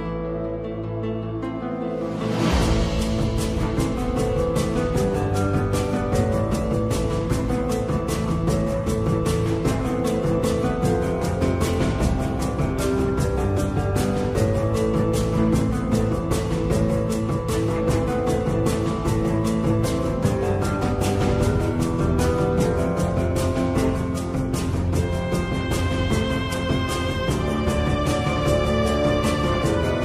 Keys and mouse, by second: 12.2 Tab, 12.5-14.2 middle drag, 14.9-15.2 middle drag, 15.8 middle drag, 16.4 Tab, 16.9 middle click, 18.4-19.6 drag, 21.4 shift+q, 23.7 middle click, 25.1 middle click, 25.9 middle click, 29.1-30.0 drag.